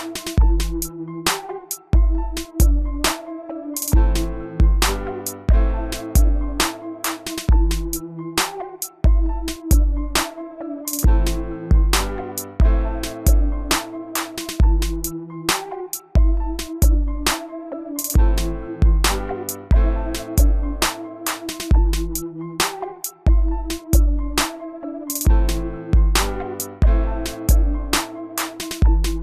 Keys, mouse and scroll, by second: 2.2 3, 3.0 Return, 5.1-26.8 drag, 26.4 l, 27.2 click.